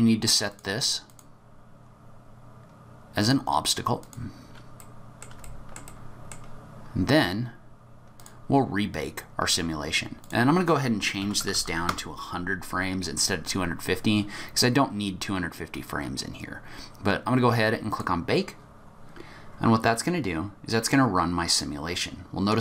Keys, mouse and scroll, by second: 0.5 click, 1.0 click, 4.0 click, 4.8 middle click, 5.4 shift+middle click, 5.8 middle click, 8.1 click, 10.2 click, 11.5 KP_0, 17.9 click, 20.0 click.